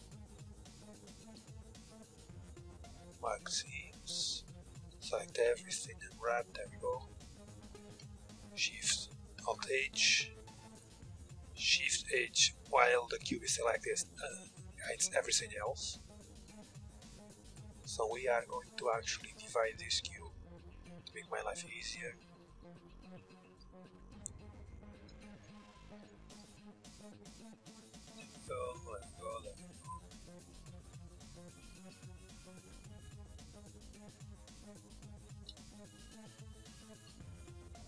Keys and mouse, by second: 1.7 ctrl+e, 4.1 a, 4.3 a, 4.9 u, 7.4 Tab, 9.0 alt+h, 10.5-12.0 super+drag, 11.6 shift+h, 13.6-14.7 middle drag, 15.4 Tab, 16.7-18.7 drag, 17.5 ctrl+r, 18.6 ctrl+r, 19.7 ctrl+r, 20.5 a, 22.5-24.8 middle drag, 24.8 ctrl+z, 25.4 middle click, 26.0 b, 27.9 b, 28.4 b, 29.7 b, 30.4 b, 32.3 b, 33.6 b, 34.2 b, 34.9-37.8 middle drag.